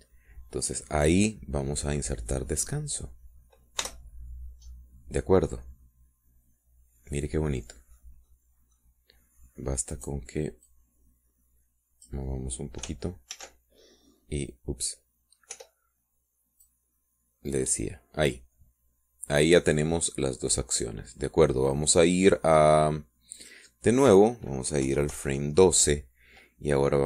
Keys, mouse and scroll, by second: 0.0 click, 1.3-1.9 scroll up 2, 5.4 Return, 6.3-8.0 drag, 8.0-9.6 middle drag, 9.8 middle click, 11.5 middle click, 12.2-13.8 drag, 14.9 ctrl+z, 17.1 Return, 18.2-19.5 drag, 24.9 click, 26.4 Left.